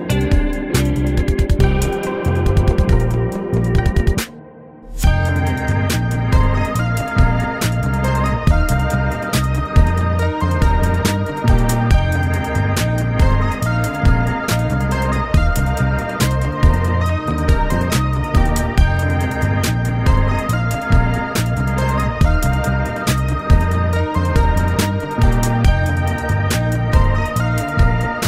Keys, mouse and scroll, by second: 0.8 ctrl++, 2.1 ctrl+-, 2.8 ctrl+-, 2.9 right click, 3.1 right click, 3.9 right click, 4.0 Tab, 4.5 right click, 4.9 ctrl+z, 7.0 right click, 7.5 right click, 8.4 right click, 8.7 ctrl+-, 9.4 right click, 13.2 space, 13.4 ctrl+z, 14.6 right click, 15.7 right click, 16.2 ctrl+z, 16.5 ctrl+z, 16.7 ctrl+z, 18.5 ctrl++, 19.0 ctrl+-, 19.8 ctrl+z, 20.5 ctrl+z, 20.5 right click, 20.6 ctrl+z, 21.8 right click, 22.7 space, 23.7 right click, 23.8 ctrl+z, 24.9 ctrl+z, 25.7 right click, 26.2 ctrl+z.